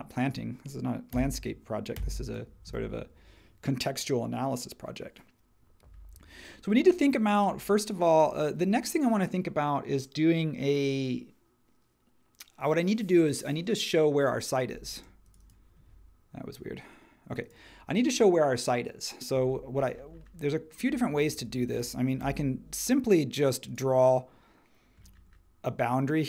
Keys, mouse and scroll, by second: 1.1 BackSpace, 1.9 Return, 14.9-16.9 drag, 22.2 l.